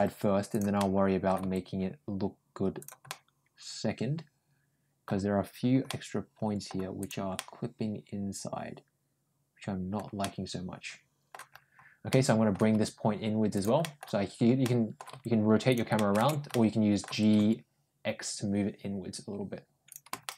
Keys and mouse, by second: 0.6 middle click, 1.2 g, 2.9-4.9 middle drag, 5.7 middle click, 6.8 click, 7.2-9.8 middle drag, 10.0-11.1 middle drag, 11.9 middle click, 12.5 g, 13.6 middle click, 14.4 middle click, 15.0 g, 15.8 middle click, 16.4 middle click, 20.1 middle click.